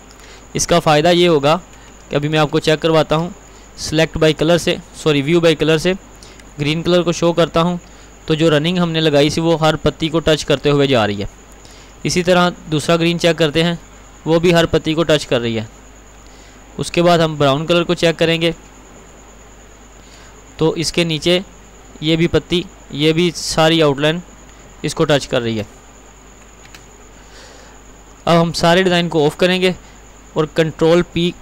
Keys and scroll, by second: 3.1 alt+c, 11.9 alt+c, 17.0 alt+c, 26.7 ctrl+z.